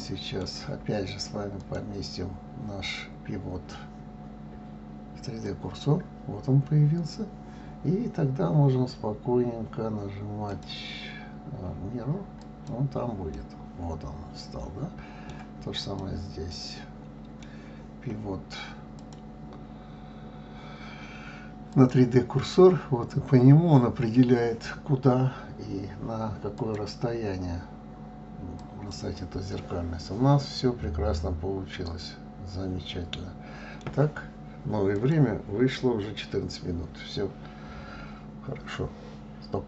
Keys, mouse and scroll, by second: 1.6-4.6 drag, 10.5-13.3 drag, 13.3-15.8 middle drag, 15.8 click, 16.5-19.0 middle drag, 19.0-22.0 drag, 26.6-29.5 drag, 29.5-32.5 middle drag.